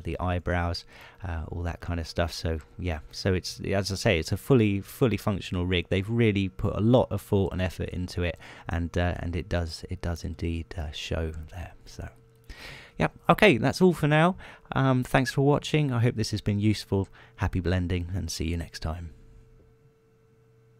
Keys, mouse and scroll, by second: 0.0 click, 0.4 right click, 0.5 g, 1.0 click, 1.6 right click, 1.8 g, 2.5 click, 2.9 scroll down 1, 3.3 middle click, 4.3 shift+middle click, 6.4 scroll down 2, 7.3 middle click, 9.5 middle click, 10.8 middle click, 11.3-11.7 scroll down 2, 11.7 shift+middle click, 13.3 middle click, 13.7 middle click, 14.1 shift+middle click.